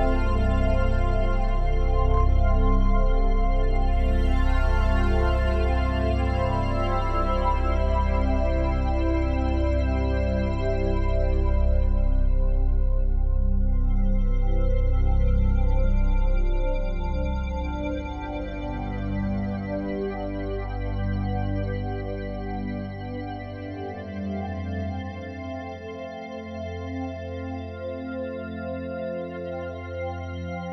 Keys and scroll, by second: 14.1 typing, 22.2 typing.